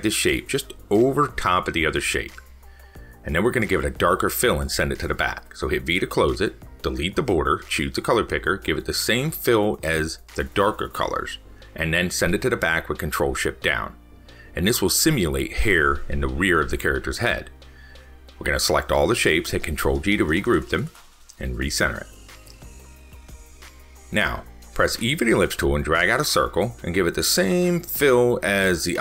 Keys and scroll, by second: 11.2 ctrl+shift+Down, 15.8 ctrl+s, 18.5 ctrl+g.